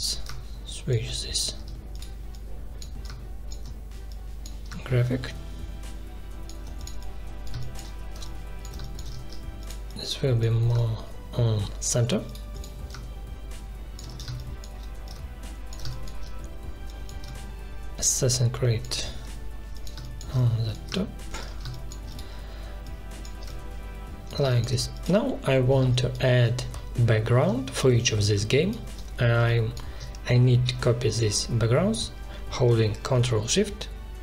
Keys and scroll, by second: 1.4 ctrl+z, 7.5 space, 8.8 space, 14.2 space, 19.9 space, 21.7 space, 24.4 space, 28.3 space.